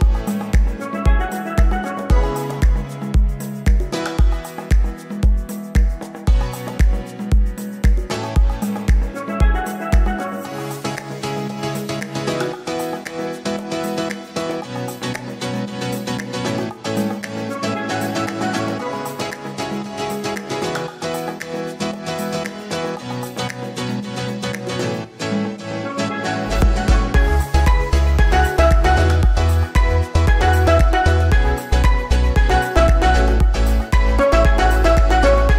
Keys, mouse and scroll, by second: 0.2 shift+middle click, 0.4-0.9 scroll, 1.9-2.2 scroll, 2.2 scroll up 5, 2.4 scroll, 5.4 shift+middle click, 5.7-6.1 scroll up 4, 6.1 Tab, 6.3 alt+z, 6.4 scroll up 1, 6.7 shift+middle click, 6.9 click, 7.0 Tab, 7.1 scroll up 1, 7.2 shift+middle click, 7.6 scroll up 1, 7.9 alt+z, 8.0 click, 8.3 alt+z, 11.9-12.3 scroll down 2, 12.3 middle click, 13.0-14.8 drag, 15.0 shift+middle click, 15.2-19.3 drag, 19.3 scroll up 1, 19.4 shift+middle click, 19.6 alt+z, 19.9 alt+z, 21.5 scroll down 11, 21.8 shift+middle click, 21.8 shift+scroll up 1, 21.9 click, 22.2 ctrl+s, 22.4 scroll up 2, 22.8-23.2 scroll down 3, 23.2 click, 23.9 scroll up 5, 24.1 shift+middle click, 24.8 scroll down 2, 25.0 middle click, 25.4 scroll up 3, 25.7 shift+middle click, 26.5-27.7 drag, 27.7-28.2 shift+middle drag, 28.2-28.6 scroll up 4, 28.6-29.5 shift+middle drag, 29.5-30.5 drag, 30.6-31.7 drag, 32.1 drag, 32.8 shift+drag, 33.2 middle click, 33.6-34.4 scroll up 1, 34.4 shift+d.